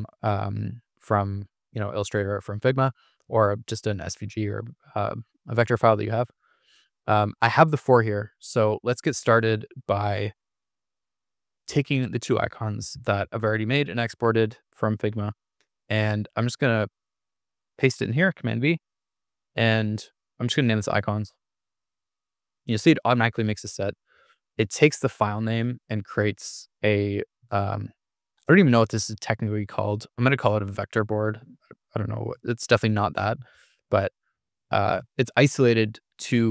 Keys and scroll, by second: 12.9 super+c, 16.8 super+v, 20.2-21.5 typing, 32.6 super+=.